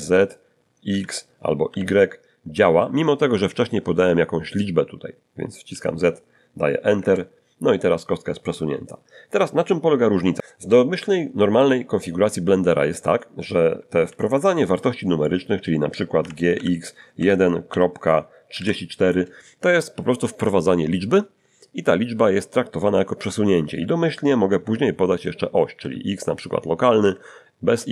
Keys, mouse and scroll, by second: 0.9 x, 1.7 y, 5.7 z, 6.9 Return, 14.1 alt+g, 15.2 middle click, 16.2-18.5 typing, 25.8 x, 27.0 x.